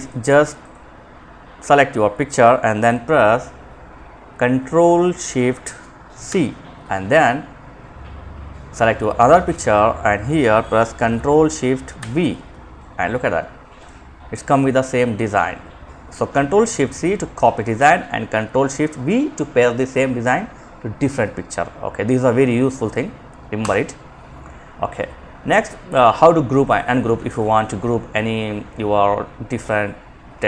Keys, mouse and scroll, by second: 5.5 ctrl+shift+c, 8.4 click, 11.2 ctrl+shift+v, 13.0 click, 22.7 Delete, 25.8 click, 26.5 ctrl+click.